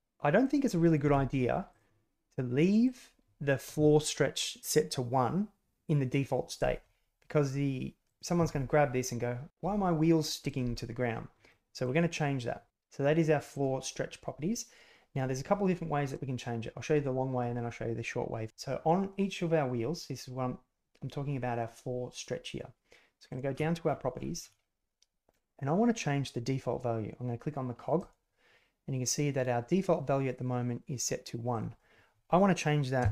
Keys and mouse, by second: 0.1 g, 0.6 drag, 2.8-6.9 drag, 8.0 click, 11.4-11.7 drag, 13.5-33.1 drag.